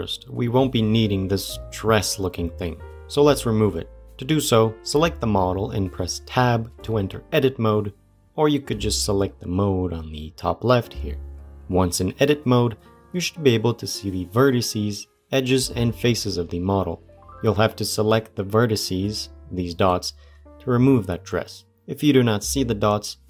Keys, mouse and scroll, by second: 5.0 click, 6.6 Tab.